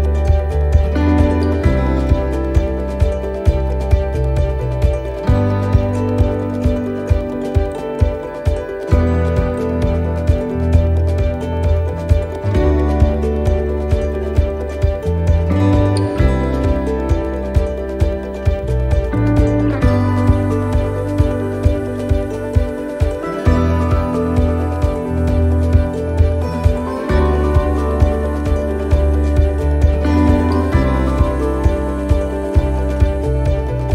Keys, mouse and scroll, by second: 0.5 right click, 1.1 shift+right click, 1.6 middle click, 2.8 e, 6.9 middle click, 6.9 s, 7.6 ctrl+r, 10.1 click, 11.4 right click, 11.9 shift+right click, 12.7 shift+right click, 13.5 click, 14.7 middle click, 15.7 scroll up 1, 16.0 middle click, 16.6 scroll down 1, 17.1 shift+middle click, 17.6 middle click, 17.9-18.6 scroll down 2, 18.3 middle click, 19.4 a, 21.0 click.